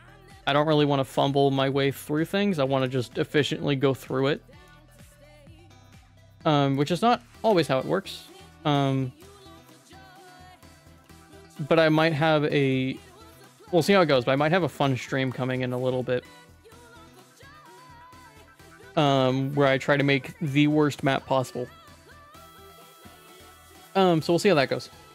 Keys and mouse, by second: 1.1 middle click, 1.9 shift+middle click, 2.8 shift+click, 3.3 ctrl+s, 3.4 middle click, 4.4 shift+middle click, 5.0-6.0 middle drag, 6.8 click, 7.9 middle click, 8.3 /, 9.2 shift+click, 9.7 ctrl+s, 9.9 middle click, 10.5 shift+middle click, 11.0 middle click, 11.6 middle click, 12.0 middle click, 12.6 shift+middle click, 13.1 middle click, 13.9 middle click, 14.2 shift+middle click, 14.6 shift+middle click, 15.0 middle click, 15.8 shift+middle click, 16.5 middle click, 17.1 shift+middle click, 17.5 middle click, 18.7 middle click, 19.7 middle click.